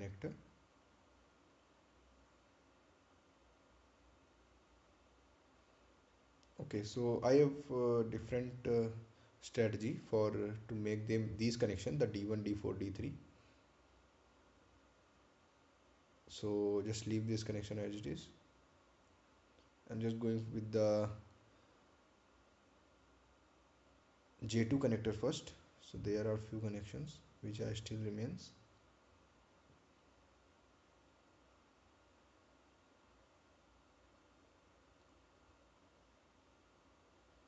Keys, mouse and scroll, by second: 0.6 click, 4.3-4.8 scroll up 1, 7.5 scroll up 1, 7.7 ctrl+click, 9.6 ctrl+click, 20.8-21.1 scroll up 1, 21.3-21.6 scroll down 1, 23.1 scroll up 1, 25.1 click, 26.8 ctrl+click, 33.0-33.5 scroll down 1, 35.8 ctrl+click.